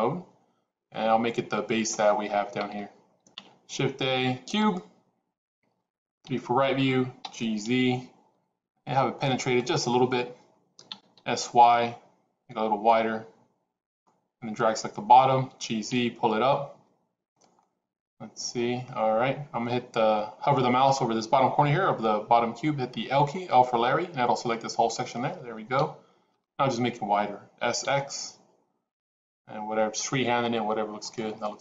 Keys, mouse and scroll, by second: 3.2 shift+a, 6.1 KP_3, 7.1 g, 10.7 s, 14.5 click, 15.3 g, 17.5-18.7 middle drag, 24.8 l, 25.7 KP_1, 27.5 s, 31.3 middle click.